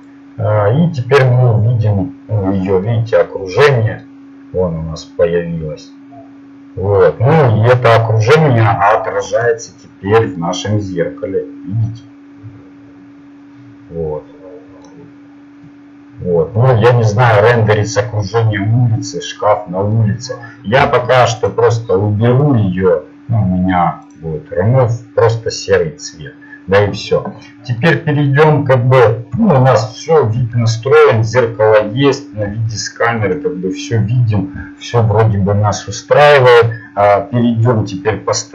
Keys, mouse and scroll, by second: 2.3-4.1 drag, 7.2 click, 11.0-14.2 drag, 29.5 KP_0.